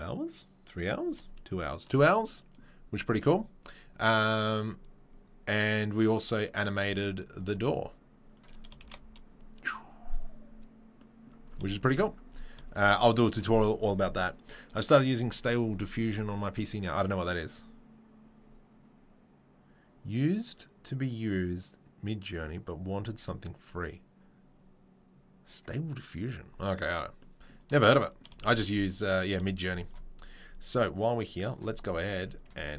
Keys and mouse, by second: 4.6 click, 4.6 right click, 6.4 click, 7.0-7.5 shift+right drag, 7.5-8.4 drag, 8.4-31.2 middle drag, 8.8 shift+space, 12.8 shift+space, 31.2-32.4 drag, 31.8 Tab, 32.2 Tab, 32.4-32.7 middle drag.